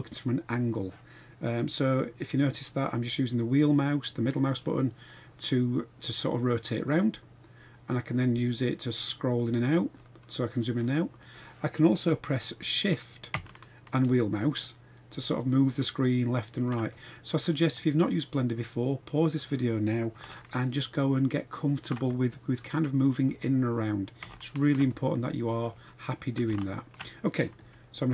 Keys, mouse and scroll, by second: 3.1-8.0 middle drag, 8.8-9.2 scroll up 4, 9.4-10.5 scroll down 7, 10.5-11.2 scroll up 5, 11.2 scroll down 1, 11.3 scroll up 1, 11.6 scroll down 2, 11.8 scroll up 2, 14.5-16.7 shift+middle drag, 16.9-19.9 middle drag, 20.3-21.8 shift+middle drag, 22.1-23.0 middle drag, 23.3-23.7 scroll up 4, 23.8 scroll down 2, 24.3-24.7 shift+middle drag, 24.8-25.5 middle drag, 25.7-26.2 middle drag, 26.5-27.0 shift+middle drag, 27.0 shift+scroll down 1.